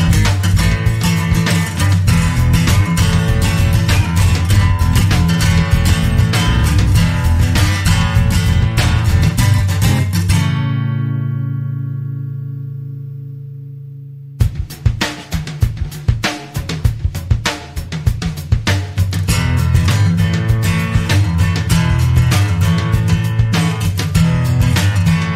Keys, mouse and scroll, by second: 0.6 scroll down 1, 1.1 click, 1.8 click, 2.7 click, 4.7 5, 5.4 click, 7.0 click, 7.9-8.8 typing, 10.0 =, 10.8 Escape, 12.1 BackSpace, 12.4 2, 12.7 0, 14.4 click, 16.1 5, 17.2 click, 18.3 click, 19.9 click, 24.9 click.